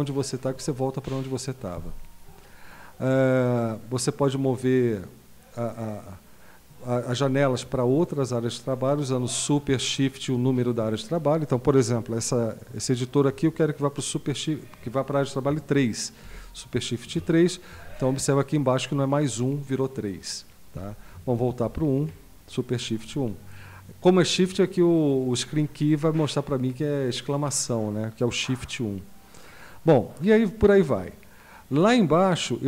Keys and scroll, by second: 16.3 super+#, 21.6 super+!.